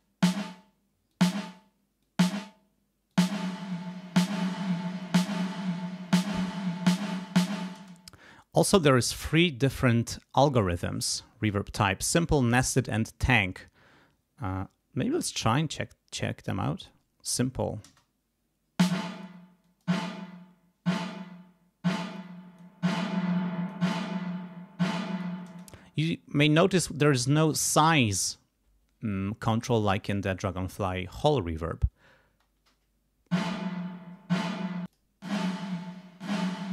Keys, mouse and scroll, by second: 1.1 click, 2.0 click, 3.1 click, 4.9 click, 6.8 click, 7.7 space, 16.8 click, 17.8 space, 19.0 click, 19.6 click, 22.1 click, 23.4 click, 24.9 click, 25.5 space, 32.3 space, 34.9 click.